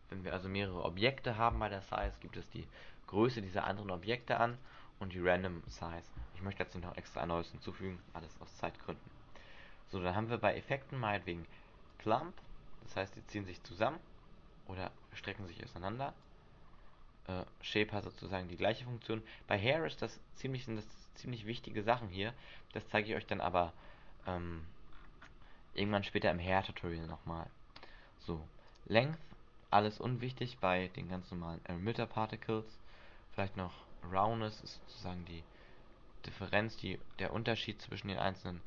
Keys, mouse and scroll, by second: 0.9 scroll down 4, 4.2 click, 4.4 click, 4.7 click, 4.8 click, 12.0 click, 16.4 click, 20.9 click, 24.0-25.0 scroll up 5, 25.0-25.9 scroll up 6, 25.9 scroll down 1, 26.6-28.5 scroll down 13, 28.8 click, 33.5 click, 37.2 scroll up 1, 37.8 middle click, 37.8 scroll up 6.